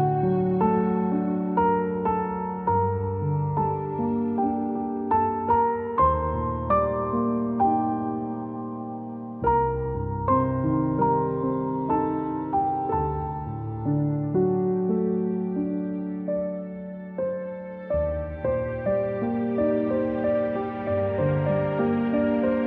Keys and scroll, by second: 2.8 shift+Left, 3.4 shift+Left, 4.4 Up, 17.1 shift+Up, 17.7 shift+Down, 17.9 shift+Down, 18.6 shift+Down, 18.7 shift+Up, 18.9 shift+Up, 19.1 shift+Up, 19.6 shift+Up, 20.6-21.3 typing.